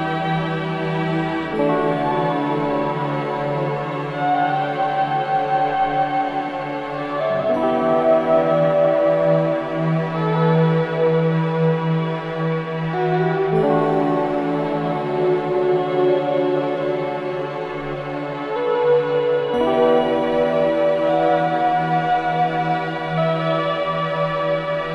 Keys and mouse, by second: 2.1 click, 2.6 Tab, 4.3 ctrl+r, 7.5-11.0 drag, 13.7 ctrl+r, 17.4-17.8 drag, 17.8-18.2 middle drag, 19.9 Tab, 20.3 click, 23.6-24.9 drag.